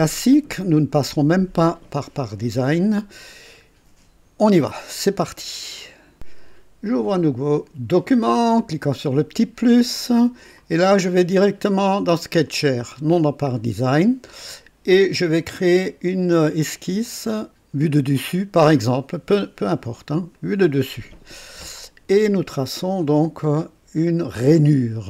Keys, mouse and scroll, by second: 6.1 click, 8.5 click, 12.6 click, 17.0 click, 20.3 click.